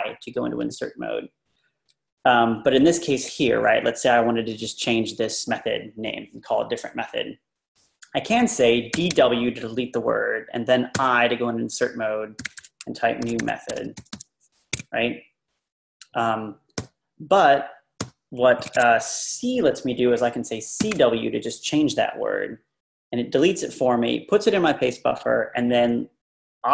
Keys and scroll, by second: 2.6 Down, 2.6 Down, 2.7 Down, 2.9 Down, 3.2 Left, 8.7-9.6 typing, 11.0 i, 12.2-14.6 typing, 14.8 Escape, 16.8 u, 18.6 ctrl+r, 18.8 ctrl+r, 20.6-21.4 typing.